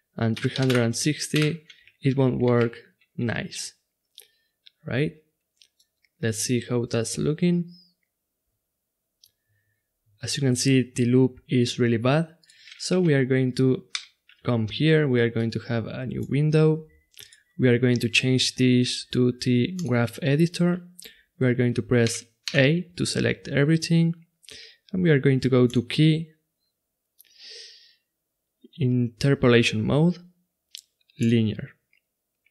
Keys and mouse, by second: 2.6 ctrl+z, 3.6-5.5 drag, 7.0 click, 12.4-14.3 drag, 13.9 n, 15.3-19.1 drag, 20.9-22.0 middle drag, 22.0 a, 22.4 a, 25.7-31.3 drag.